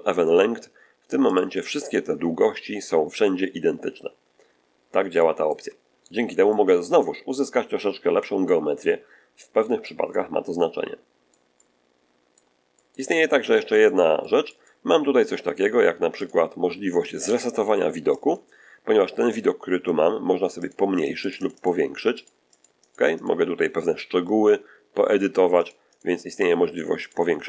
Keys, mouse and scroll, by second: 1.2 click, 4.3 middle click, 5.1 shift+click, 5.8 shift+middle click, 6.4 click, 7.3-8.3 drag, 12.6 click, 12.9 shift+middle click, 13.2 shift+middle click, 13.7-14.7 shift+middle drag, 16.1 click, 18.1 click, 20.5 click, 20.9 click, 22.1 click, 22.4 click, 23.1 click, 25.5 click, 26.2 click, 26.9 click.